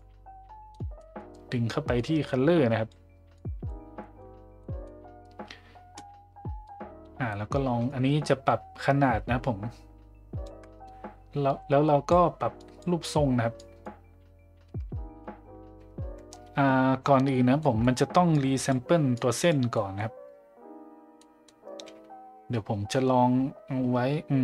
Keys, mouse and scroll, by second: 1.0 middle drag, 2.0-2.9 drag, 3.4 click, 4.0 middle drag, 4.6 middle click, 6.6-10.5 drag, 11.4 click, 12.6 drag, 13.6 click, 17.6 middle click, 18.3-18.7 drag, 19.2 click, 19.8 middle click, 21.2 middle click.